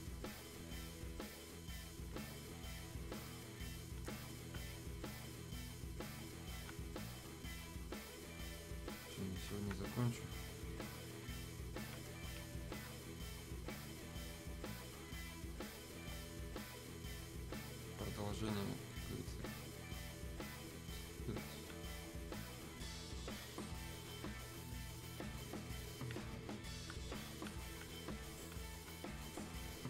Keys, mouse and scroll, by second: 22.0-29.8 drag.